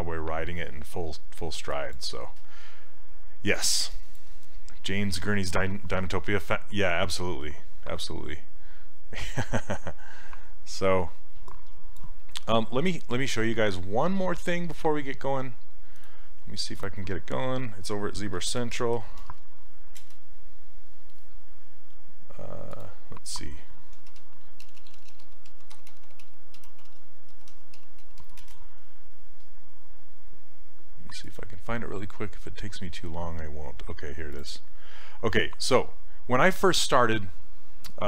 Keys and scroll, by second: 18.2-19.8 typing, 20.0 Return, 23.8-28.3 typing, 28.4 Return.